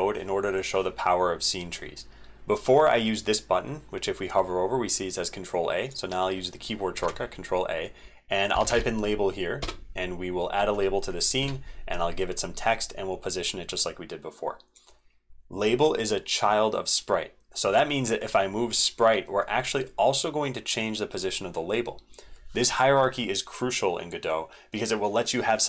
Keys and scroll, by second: 6.9 ctrl+a, 11.4 ctrl+v.